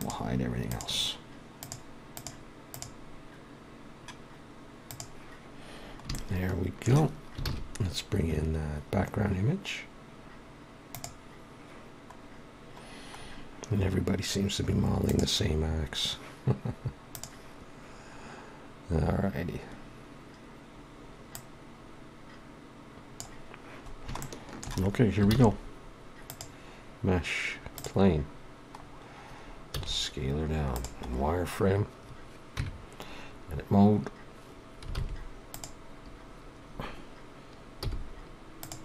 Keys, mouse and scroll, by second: 0.0 click, 1.6 click, 3.7 scroll down 1, 4.5 scroll down 1, 4.8 click, 6.1 shift+middle click, 7.5 shift+a, 12.2 scroll down 2, 13.2 scroll down 3, 15.0 click, 15.0 scroll down 1, 21.3 click, 27.8 shift+a, 28.7-29.8 scroll down 2, 29.8 s, 31.5 scroll up 6, 38.6 g.